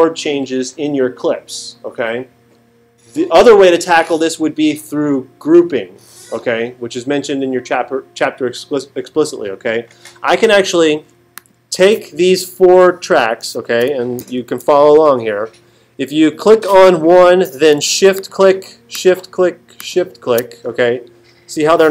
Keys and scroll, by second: 14.2 alt+super+8.